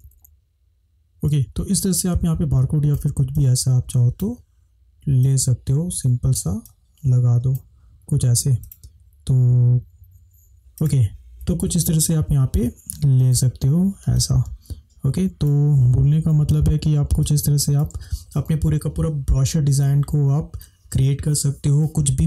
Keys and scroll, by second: 0.0 Down, 10.5 Right, 14.2 space, 16.5 ctrl+-, 18.0 ctrl+space.